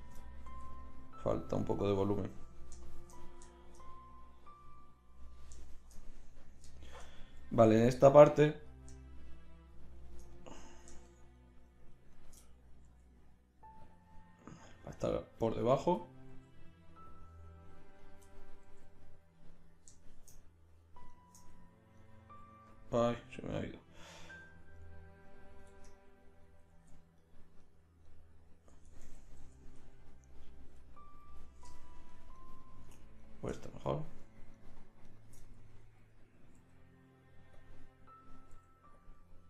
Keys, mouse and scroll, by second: 0.2 right click, 0.4 middle click, 0.5 g, 3.8 middle click, 5.1 middle click, 5.7 middle click, 8.6-12.1 right drag, 12.1 middle click, 12.9 g, 15.3 middle click, 15.8 right click, 16.0-17.2 middle drag, 17.3 right click, 17.5 middle click, 18.2 middle click, 18.4 middle click, 18.7 g, 19.2 middle click, 25.6 Tab, 26.7 z, 28.8 Tab, 29.4 z, 30.4-32.9 right drag, 36.6 g, 37.6 middle click, 38.5 g.